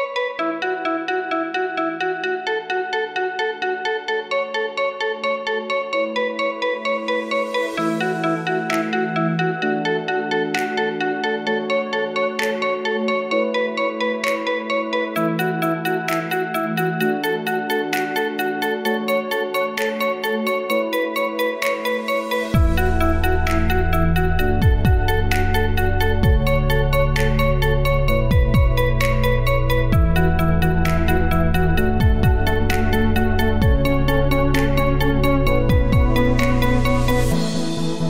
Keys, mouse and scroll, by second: 0.5-1.9 drag, 1.9-2.5 scroll up 1, 2.5 click, 3.5 Tab, 4.1 click, 4.6 l, 5.1-6.1 scroll up 1, 6.1 s, 11.9 s, 14.4 Tab, 14.9-15.4 scroll down 3, 15.4 click, 16.7-17.8 scroll down 2, 17.8-18.8 scroll down 1, 20.1 click, 33.0 click, 34.4-38.0 drag.